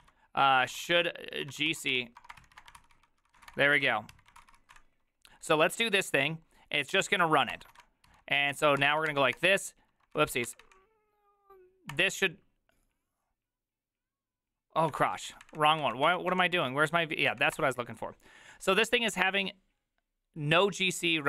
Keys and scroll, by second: 0.0-4.1 typing, 3.0 ctrl+c, 3.1 ctrl+c, 4.4 ctrl+c, 4.5 ctrl+c, 4.8 Up, 8.1 Return, 8.1 ctrl+a, 8.1 4, 8.5 Up, 8.8 ctrl+c, 9.1 Up, 9.4 Return, 10.2 ctrl+c, 10.3 ctrl+c, 10.5 Up, 10.6 Up, 11.9 Return, 15.0 ctrl+c, 15.2 ctrl+c, 15.3 ctrl+c, 15.4 Up, 15.6 Up, 15.8 Up, 16.1 Up, 16.6 ctrl+c, 16.6 Up, 16.9 v, 17.3 Up, 17.6 Return.